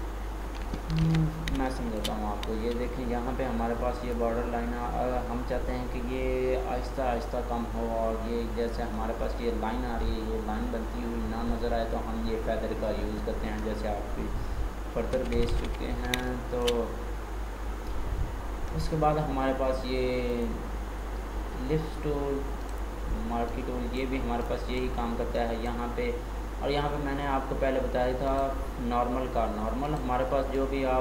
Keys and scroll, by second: 1.0 ctrl+d, 15.0 ctrl+z.